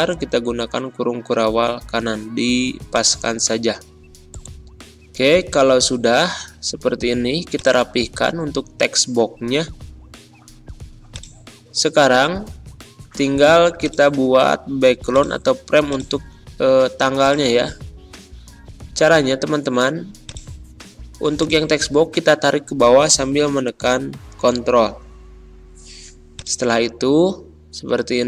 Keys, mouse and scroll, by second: 2.8 click, 3.8 BackSpace, 7.4-11.0 drag, 13.7-19.5 drag, 19.5 ctrl+z, 20.2-23.6 drag, 23.6-24.2 ctrl+scroll down 1, 24.3-25.0 typing, 26.3-28.2 ctrl+drag.